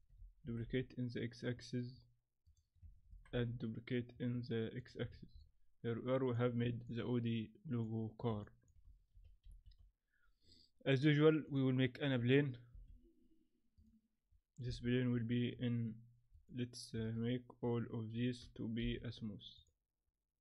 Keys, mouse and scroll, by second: 0.4 shift+d, 5.1-5.4 alt+scroll down 5, 5.4 middle click, 6.8 middle click, 8.4 middle click, 9.1 shift+c, 9.5 shift+a, 12.7 s, 14.7 KP_1, 15.1-15.5 scroll up 3, 15.8-16.3 scroll up 4, 16.3 right click, 17.2 shift+right click, 18.8 t.